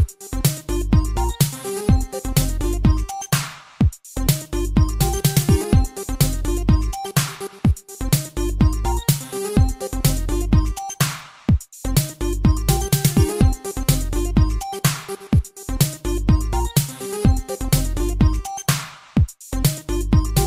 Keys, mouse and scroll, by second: 0.7 Escape, 1.1 shift+space, 3.9 Escape, 4.3 shift+space, 6.5 Escape, 7.7 g, 10.1 click, 10.6 shift+space, 12.9 Escape, 13.9 click.